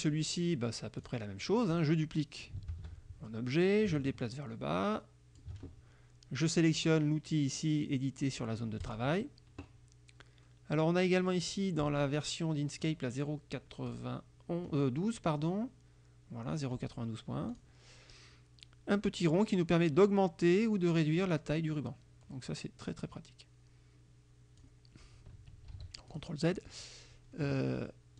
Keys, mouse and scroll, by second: 1.1 click, 2.8 ctrl+d, 3.7-5.6 ctrl+drag, 8.9 click, 12.9 click, 13.9 click, 17.6 click, 19.4-24.9 drag, 25.8 ctrl+z, 26.1 ctrl+click, 26.6 ctrl+click.